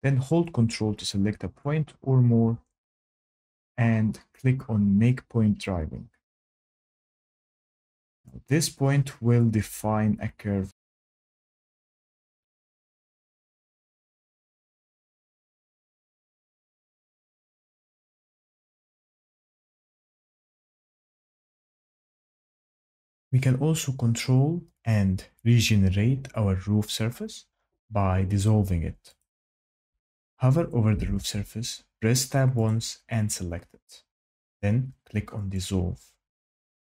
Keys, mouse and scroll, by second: 0.7 ctrl+click, 2.0 ctrl+click, 5.9 click, 8.6 click, 11.9 click, 13.4 ctrl+z, 14.4 click, 16.5 click, 19.3 ctrl+z, 20.1 ctrl+z, 20.8 ctrl+z, 21.5 ctrl+z, 22.0 ctrl+z, 22.4 ctrl+z, 29.2 click, 31.0 Tab, 32.6 click, 35.5 click.